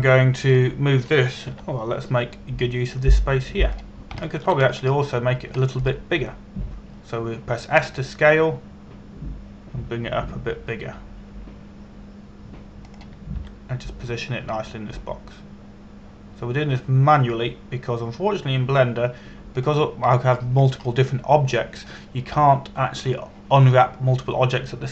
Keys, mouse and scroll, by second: 0.0 shift+middle click, 0.6 scroll up 1, 1.0 shift+middle click, 1.4-2.2 scroll up 1, 2.2 right click, 3.1 g, 5.3 click, 6.0 shift+middle click, 6.3-7.1 scroll up 1, 7.3 shift+middle click, 9.4 s, 14.5 click, 15.1 g, 21.2 click, 21.7-22.7 scroll down 1, 24.7 click.